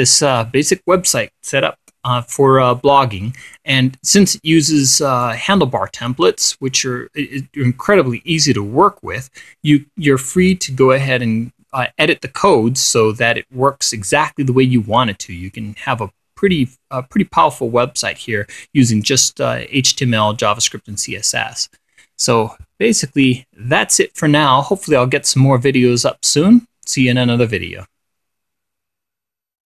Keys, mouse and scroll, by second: 0.8 click, 5.7 click, 22.3-23.7 drag, 23.8 click.